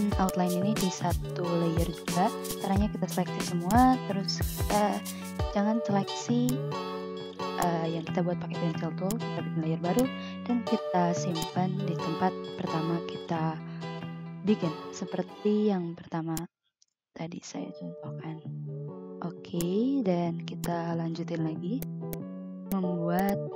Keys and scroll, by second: 4.8 ctrl+x, 19.1 v, 21.8 ctrl+z, 22.2 v, 22.9 a.